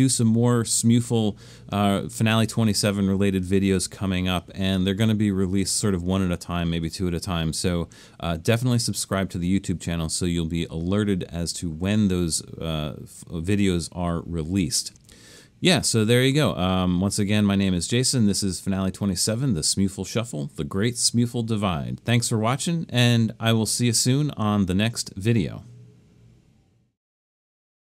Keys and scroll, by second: 23.3 typing.